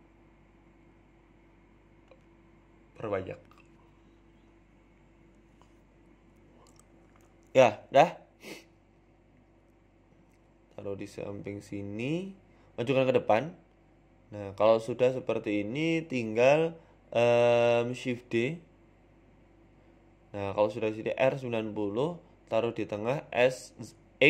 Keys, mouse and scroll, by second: 1.1 click, 3.5 click, 5.2 click, 7.4 click, 8.4 f, 8.6 y, 9.0 x, 9.9 g, 12.2 middle click, 13.4 g, 14.6 z, 15.8 g, 18.6 KP_3, 19.2 KP_1, 21.6 shift+d, 22.5 r, 24.0 g.